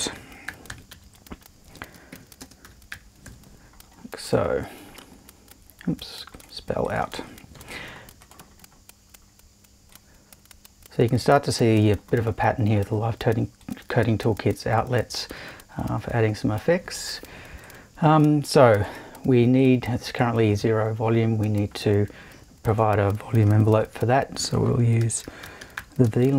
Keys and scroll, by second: 0.1 super+o, 0.2-3.7 typing, 7.5 BackSpace, 23.8 super+i, 24.8-26.3 typing.